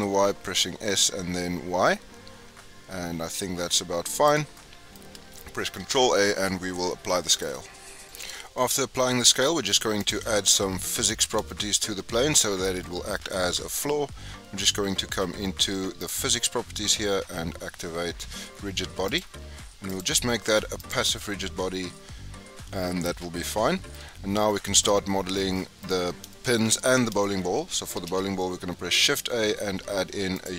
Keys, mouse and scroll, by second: 4.5-5.8 middle drag, 5.8 ctrl+a, 8.5 scroll down 2, 8.5-9.0 middle drag, 9.0-9.3 scroll up 2, 9.4-10.0 middle drag, 10.0 click, 10.5-11.9 middle drag, 11.9-12.3 scroll up 2, 12.3-16.0 middle drag, 16.0 click, 19.8-23.0 drag, 23.2 scroll down 1, 23.4-24.0 middle drag, 24.0-24.4 scroll up 4, 24.4-25.8 shift+middle drag, 25.8-26.3 scroll up 2, 26.3-27.9 shift+middle drag, 27.9 shift+a.